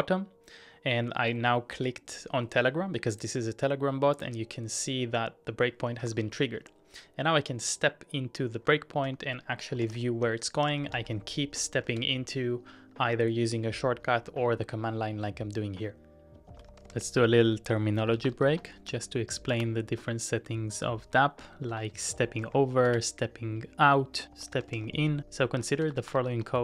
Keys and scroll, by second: 6.0 super+Tab, 9.1-12.4 typing, 14.2-15.6 typing.